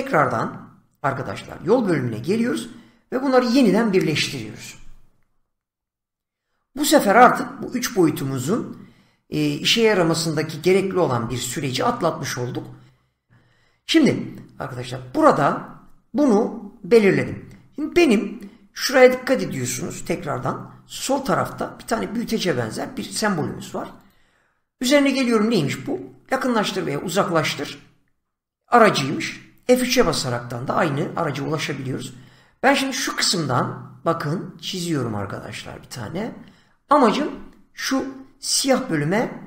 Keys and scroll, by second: 20.0 <, 29.6 F3.